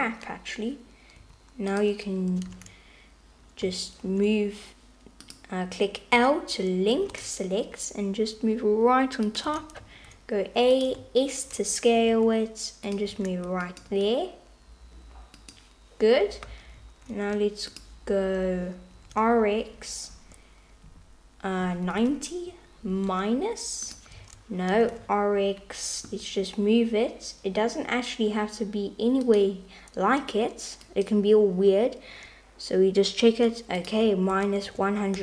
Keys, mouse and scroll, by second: 1.3 u, 2.5 super+z, 5.2 click, 6.2 l, 7.0 g, 9.5 a, 9.8 s, 12.2 g, 13.1 s, 13.9 g, 16.8 x, 17.1 r, 19.0 r, 24.3 super+z, 24.8 r, 30.9 click, 34.2-35.2 drag.